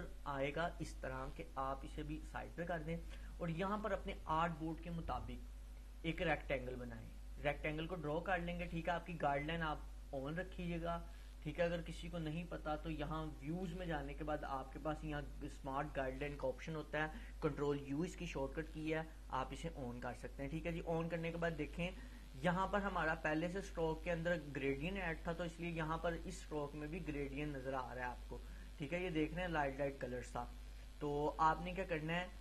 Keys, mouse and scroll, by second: 5.8-8.6 drag, 19.6-20.7 click, 23.1 click, 26.0-27.9 drag.